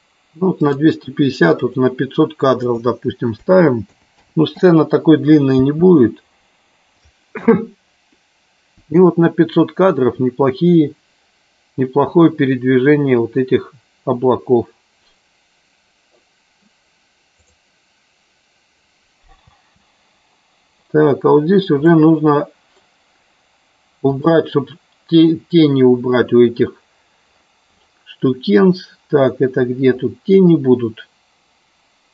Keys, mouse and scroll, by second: 0.6 click, 1.7 click, 2.8-4.8 drag, 4.1 KP_0, 5.6 space, 19.7 space, 22.1 middle click, 24.4 click.